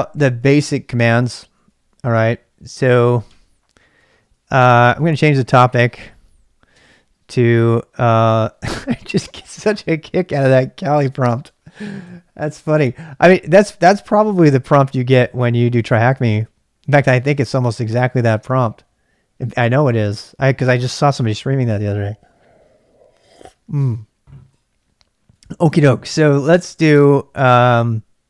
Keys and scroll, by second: 0.0-1.8 typing, 3.1 ctrl+[, 3.2-4.3 typing, 5.7 typing, 6.7 typing, 7.9-8.6 typing.